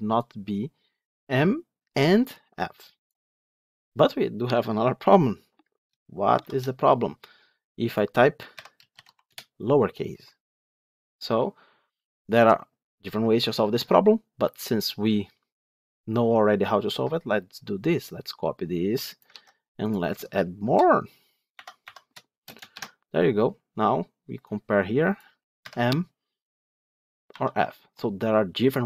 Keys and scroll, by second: 6.3 ctrl+shift+F10, 19.2 ctrl+c.